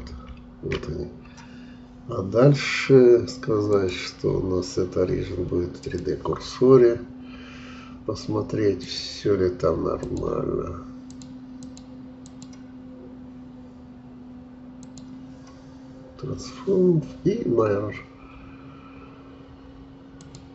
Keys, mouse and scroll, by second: 0.0 ctrl+j, 3.6-6.7 drag, 8.8-17.8 drag, 20.1-20.5 drag.